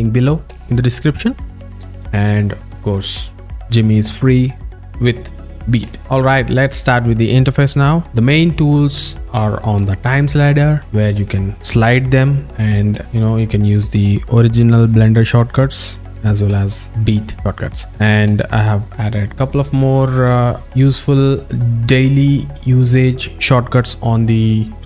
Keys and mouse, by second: 8.1 alt+middle click, 10.9-12.6 alt+middle drag, 16.4 alt+middle click.